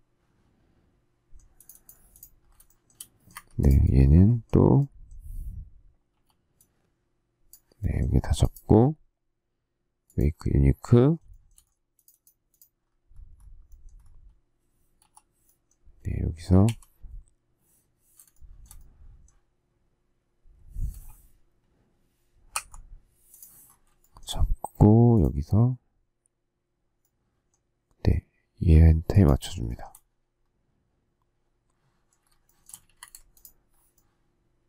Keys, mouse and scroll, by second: 2.6 shift+middle click, 3.3 Escape, 6.1 k, 11.2 shift+middle click, 14.9 k, 16.6 q, 18.3 shift+middle click, 24.0 shift+middle click, 29.6 shift+middle click, 32.2 shift+scroll, 32.4 shift+middle click, 32.8 space, 32.9 Escape.